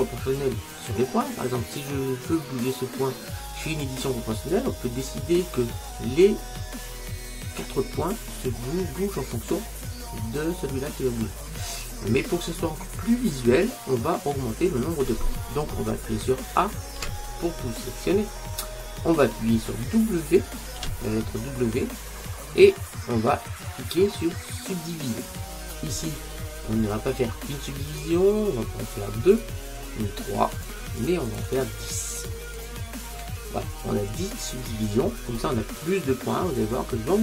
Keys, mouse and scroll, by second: 11.9-12.8 scroll up 1, 12.8-13.9 scroll down 1, 13.9-14.3 scroll up 1, 14.3-17.0 scroll down 1, 17.0 a, 18.1-20.2 middle drag, 20.9 w, 28.0-34.4 drag.